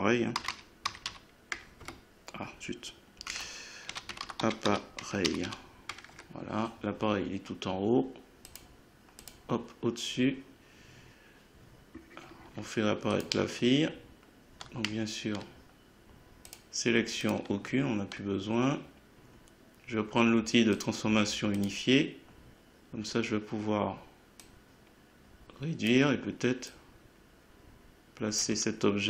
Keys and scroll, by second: 0.0-1.6 typing, 1.8 Return, 3.3 F2, 3.6-5.9 typing, 6.1 Return.